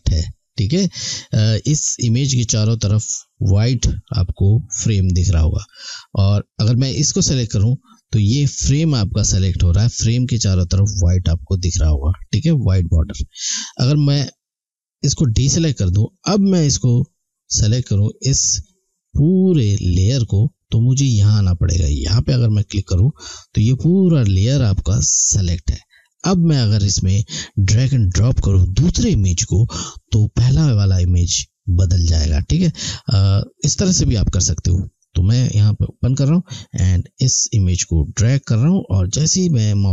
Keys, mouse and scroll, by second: 7.0 click, 15.4 click, 22.5 click, 34.9 click.